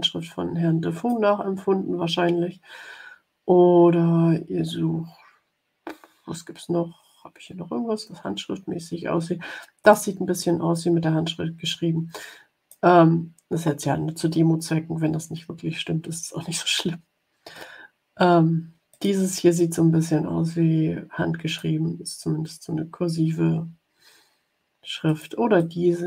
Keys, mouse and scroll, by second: 2.5 scroll down 1, 3.1-3.8 scroll down 2, 5.9-7.0 scroll down 4, 7.4 scroll down 2, 9.7 click, 10.6-12.8 drag, 13.4-13.9 scroll down 2, 15.2-16.7 scroll down 6, 17.1 scroll down 1, 18.9 click, 19.5-21.7 drag, 22.7-23.8 scroll down 3, 25.0 click, 25.5-26.0 drag.